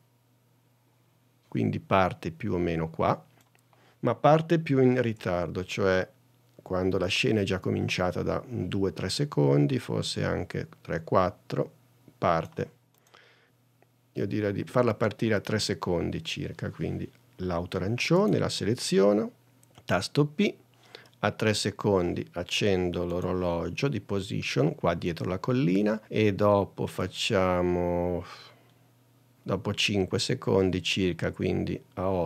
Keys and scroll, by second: 6.1 super+Tab, 19.7 p.